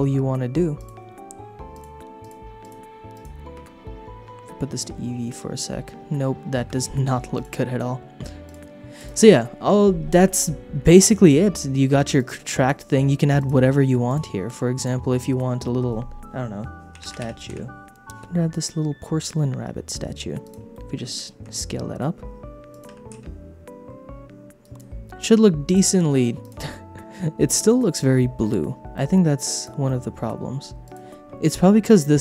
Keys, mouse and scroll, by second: 0.7 click, 1.7 click, 2.2-3.7 drag, 3.7 space, 6.6 space, 7.3-8.7 drag, 9.0 click, 12.2 click, 13.3 click, 14.0 click, 14.7-17.9 drag, 20.4 click, 20.7 shift+middle click, 21.4 s, 22.7 click, 22.9 r, 23.1 z, 25.6 click, 26.4 click, 26.7 middle click, 27.6 shift+middle click, 28.9 middle click, 29.5 click, 29.8 click, 30.0 middle click, 30.8 click.